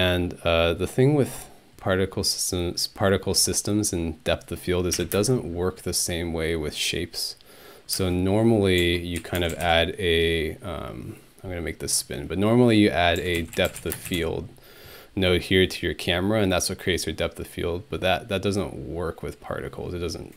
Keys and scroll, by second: 5.0 Home, 5.1 space, 8.0-10.1 typing, 13.0-14.7 typing.